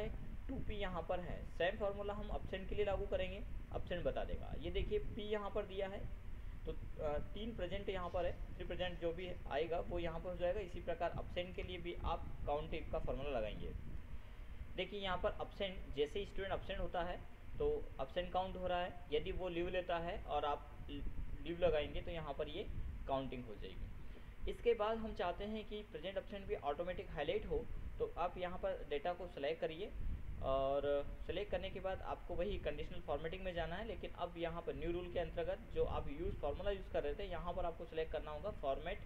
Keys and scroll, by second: 14.3 ctrl+F7.